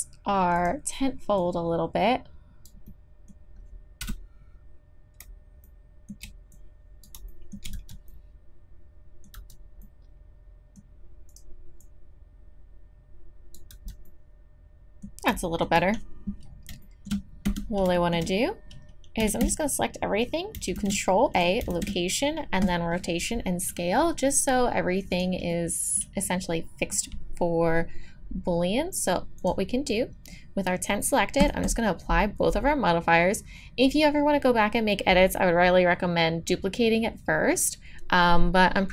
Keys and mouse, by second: 0.6 click, 2.7 click, 2.9-4.0 middle drag, 4.0 KP_Decimal, 4.1 KP_Enter, 4.1 KP_3, 7.7 z, 9.3 z, 10.2-11.8 drag, 13.4 click, 13.7 z, 14.1 click, 17.5 Tab, 19.2 a, 19.4 a, 20.8 ctrl+a, 21.7 ctrl+a, 25.1 click, 25.5-31.3 drag, 31.4-33.6 drag.